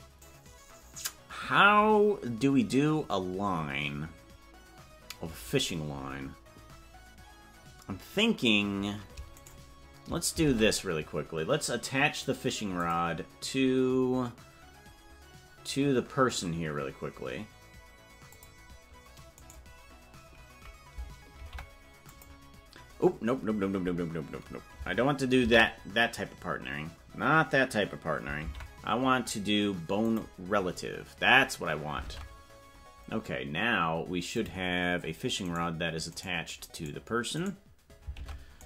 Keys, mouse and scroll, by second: 10.5 ctrl+Tab, 12.8 click, 18.3 click, 19.5 right click, 21.3 ctrl+p, 26.4 ctrl+z, 32.2 ctrl+Tab, 34.4 click, 35.6 right click, 38.2 ctrl+Tab.